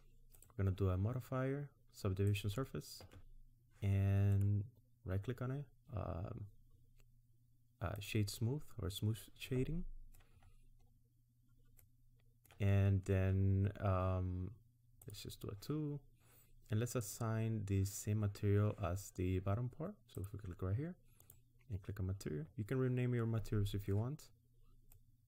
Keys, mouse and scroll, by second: 0.3 click, 2.6 Tab, 2.6-3.1 scroll down 1, 5.4 right click, 8.8-9.3 scroll down 2, 9.3 scroll down 2, 9.5 middle click, 10.4-11.0 scroll up 5, 11.8 middle click, 15.0 click, 17.1 click, 20.2 click, 24.3-24.8 scroll down 2, 24.8 middle click.